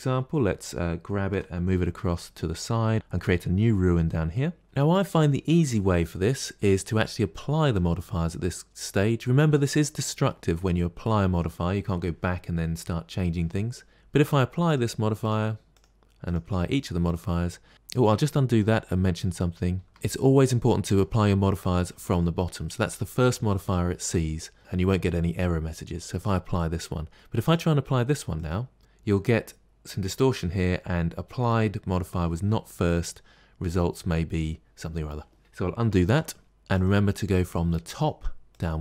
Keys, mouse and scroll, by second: 0.1 scroll up 1, 0.2-1.2 scroll down 2, 1.2 g, 2.9-4.6 shift+middle drag, 4.6 click, 7.5 click, 13.9 click, 14.5 click, 15.1 click, 15.6 click, 16.1 click, 16.6 click, 18.1 ctrl+z, 18.5 ctrl+z, 19.0 ctrl+z, 19.3 ctrl+z, 19.7 ctrl+z, 19.9 click, 20.7 click, 26.1 click, 27.3 click, 28.3 click, 35.9 ctrl+z, 36.6 click, 37.8 click, 38.4 click.